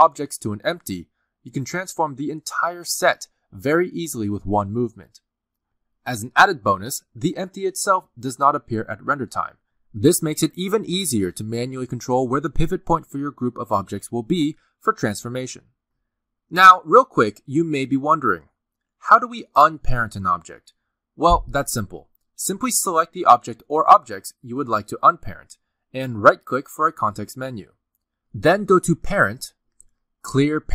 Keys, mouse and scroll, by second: 0.1 r, 3.4 middle click, 3.7 g, 5.5 middle click, 6.8 r, 7.3 g, 9.1 scroll down 1, 9.3 g, 10.2 middle click, 10.7-11.1 scroll up 2, 10.8 middle click, 11.9 middle click, 11.9 r, 12.3 s, 13.1 middle click, 14.9 alt+s, 15.1 middle click, 16.0 middle click, 16.2-16.8 scroll up 3, 16.5 middle click, 16.8 scroll down 1, 16.9 middle click, 20.9 click, 21.3 r, 23.8 click, 27.9 right click.